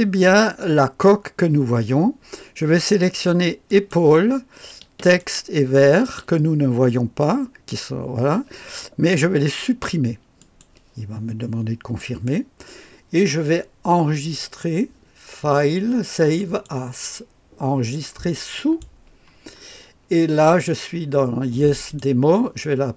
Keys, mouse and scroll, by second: 17.8 click.